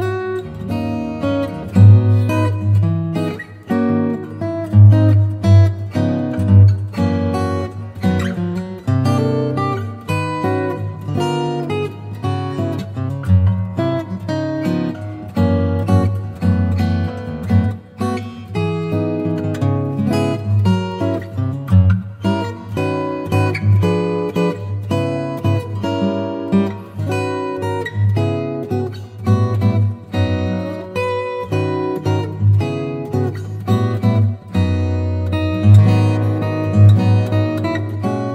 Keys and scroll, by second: 1.4 super+a, 2.8 super+v, 5.0 shift+super+a, 22.7 super+j, 34.0 Home, 35.2 z, 37.2 v.